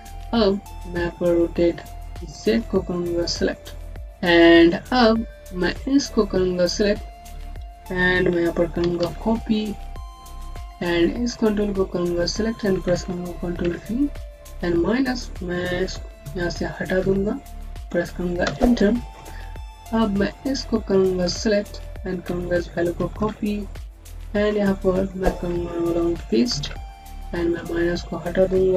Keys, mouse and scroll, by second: 2.3 typing, 3.7-4.0 scroll down 1, 4.5 click, 8.7 c, 8.9 c, 10.7 click, 13.4 v, 14.3 click, 16.1 Right, 16.9 BackSpace, 17.0 Right, 17.9 KP_2, 18.3 KP_Enter, 20.1 click, 22.9 ctrl+c, 23.1 ctrl+c, 23.8 click, 26.4 ctrl+v, 27.4 click, 28.4 BackSpace.